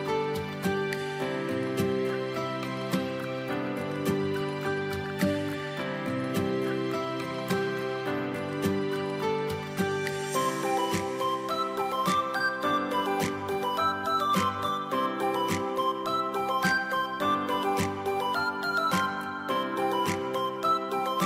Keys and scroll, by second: 0.1 o, 4.2 v, 9.7 x, 20.1 space.